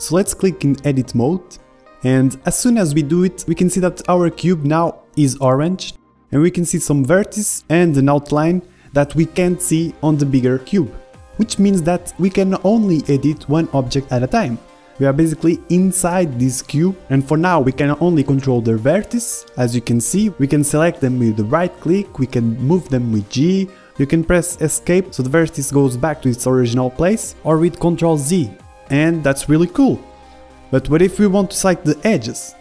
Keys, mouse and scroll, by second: 6.6 a, 6.9-10.3 middle drag, 7.8-10.3 drag, 10.3 right click, 10.5-18.7 middle drag, 18.7-20.0 right drag, 19.4 g, 20.0-21.6 middle drag, 21.0 g, 21.6-25.0 drag, 22.8 g.